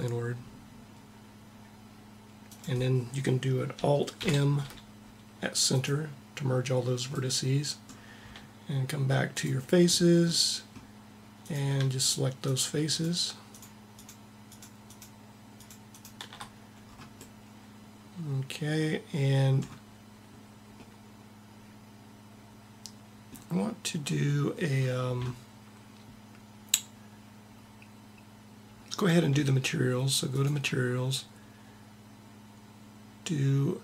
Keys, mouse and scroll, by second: 3.9 alt+m, 9.1-10.8 drag, 24.0-25.7 middle drag, 30.2-31.8 middle drag.